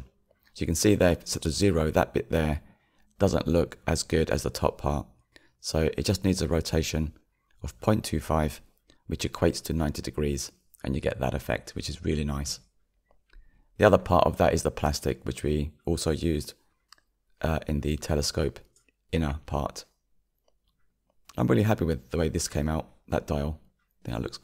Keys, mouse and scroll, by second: 4.7-9.8 middle drag, 9.8-10.6 drag, 13.0-19.9 middle drag, 19.9-20.6 scroll up 4, 22.2 scroll down 5, 23.6-24.4 scroll down 2.